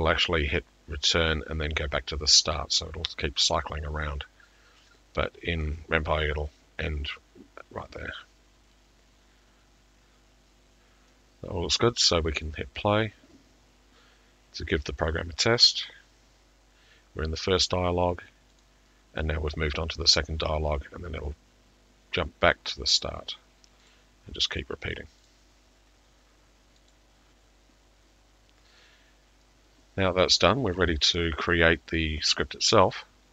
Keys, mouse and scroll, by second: 12.5 click, 18.7 click, 23.1 click, 23.9 click, 27.0 click.